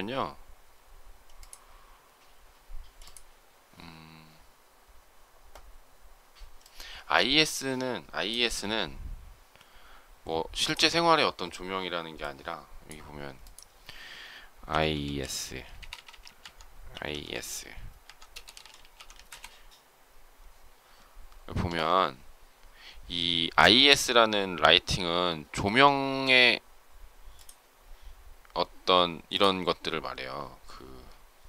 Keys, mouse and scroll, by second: 15.7 BackSpace, 16.7-17.1 typing, 18.2-19.1 typing, 19.1 Return.